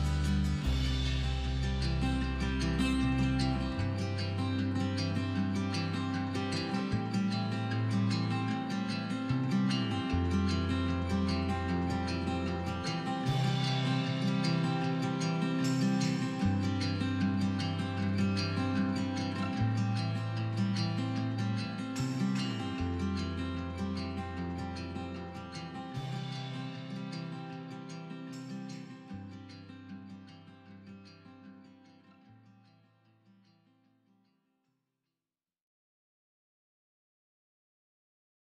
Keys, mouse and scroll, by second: 0.7 b, 5.1 click, 6.0 click, 7.1 g, 9.3 click, 9.5 scroll down 1, 9.7-12.0 middle drag, 11.5 scroll up 2, 12.0 click, 12.1 scroll down 2, 12.4-14.9 middle drag, 13.0 KP_3, 14.2-14.9 scroll up 2, 14.9 click, 15.1 middle click, 15.6 click, 15.8 shift+click, 16.7 middle click, 17.0 KP_3, 17.5 g, 18.5 click, 18.6 scroll down 1, 18.7 middle click, 18.9 click, 19.0 scroll up 1, 19.1 middle click, 19.6 click, 20.5 a, 20.8 shift+click, 21.0 middle click, 21.4 KP_3, 21.9 g, 24.3 click, 24.3 scroll down 2, 24.4-25.4 middle drag, 25.4-26.1 drag, 26.3 shift+drag, 26.4-27.4 middle drag, 28.2-29.0 middle drag, 29.0 KP_3, 29.5 g, 31.3 click, 31.5 scroll down 1, 31.5 middle click, 31.6 scroll up 1, 31.8 middle click, 32.1 click, 32.7 middle click, 32.9 scroll down 1, 33.0 middle click, 33.2 KP_3, 33.5 scroll down 1, 33.6 middle click, 33.8 scroll up 1, 34.0-34.4 shift+drag, 34.4 KP_3, 36.7 click, 36.8 middle click, 36.9 scroll up 1, 37.0 middle click, 37.5 click, 38.1 middle click, 38.3 KP_3.